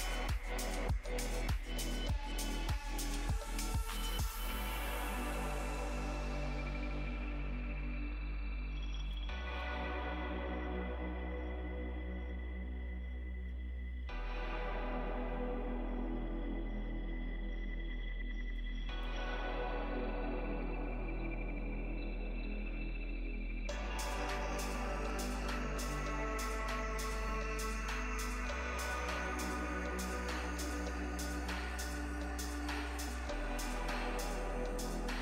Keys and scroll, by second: 2.4 s, 7.9 s, 23.6 ctrl+z, 27.5 ctrl+z.